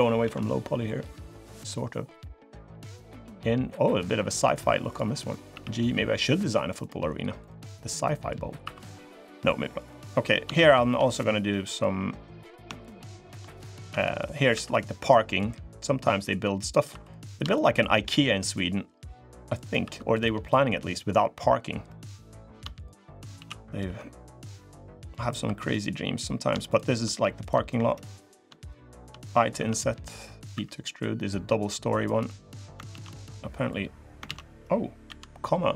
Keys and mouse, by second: 0.0 alt+s, 5.3 g, 7.2 click, 7.5 middle click, 8.4 3, 8.7 middle click, 10.3 shift+click, 10.5 shift+click, 10.8 middle click, 12.6 shift+click, 13.4 shift+click, 13.7 click, 14.3 e, 16.7 2, 17.3 shift+click, 18.3-19.5 drag, 19.6 3, 19.9 click, 20.2 middle click, 21.6 middle click, 22.5 shift+click, 23.1 s, 24.9 click, 25.2 3, 26.5 shift+click, 28.1 click, 28.4 shift+click, 30.3 i, 30.3 e, 32.0 click, 32.7 ctrl+z, 33.5 click, 34.1 ctrl+z, 34.8 ,.